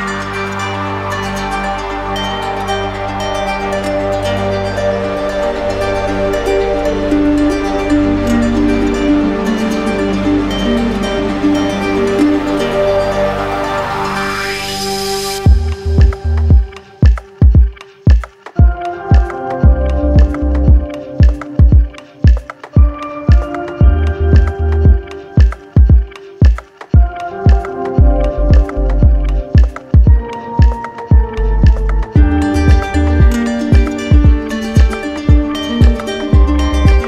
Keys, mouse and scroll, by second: 5.7-6.8 drag, 7.5-8.5 drag, 12.3 click, 13.3 alt+click, 14.4 alt+click, 15.1-16.2 right drag, 16.6-17.7 drag, 19.0-20.0 drag, 21.7-22.8 drag, 23.0 click, 31.7-32.7 drag, 34.3 click, 34.6 ctrl+z.